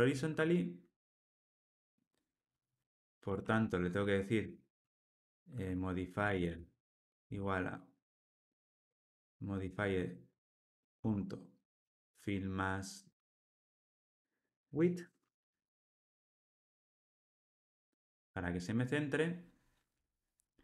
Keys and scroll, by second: 14.8 Return, 16.6 Return.